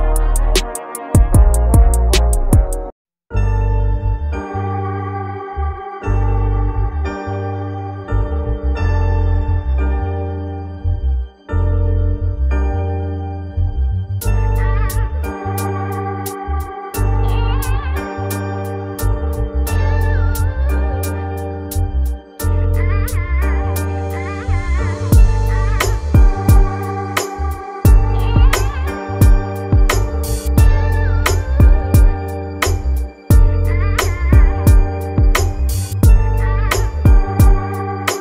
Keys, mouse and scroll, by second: 0.0 shift+click, 0.3 ctrl+l, 0.6 click, 0.9 click, 1.1 click, 1.3 shift+click, 1.7 ctrl+l, 1.8 click, 2.0 click, 2.2 click, 2.3 click, 2.8 ctrl+l, 3.0 click, 3.2 scroll down 3, 3.7 click, 5.5 click, 6.3 click, 7.3 click, 8.0 click, 8.9-9.2 click, 9.2 click, 9.4 scroll down 1, 9.9 click, 10.0 scroll down 1, 11.1 ctrl+l, 11.4 click, 12.0 ctrl+l, 12.1 scroll down 1, 12.3 click, 12.5 click, 13.1 click, 14.3 click, 15.0 click, 15.3 ctrl+l, 15.4 click, 15.5 click, 15.9 click, 16.0 click, 16.2 ctrl+click, 16.5 click, 16.6 shift+click, 17.0 ctrl+l, 17.2-17.5 scroll down 4, 18.0 click, 18.9-19.9 scroll down 4, 20.6-23.8 drag, 24.0-25.5 drag, 26.6 click, 27.1 click, 27.7 click, 28.8 click, 29.0 scroll up 2, 29.3 click, 29.7 scroll up 1, 30.0-30.5 scroll down 2, 31.0 click, 32.2 click, 33.0 scroll down 1, 33.2-33.7 middle drag, 33.7 scroll up 5, 34.0 scroll down 1, 34.5 click, 35.3 g, 36.4 scroll down 1, 36.6 middle click, 36.8 scroll up 4, 37.0-37.5 scroll down 1, 37.5 KP_7, 37.6 scroll up 1, 37.7-38.1 scroll down 2, 38.1 click.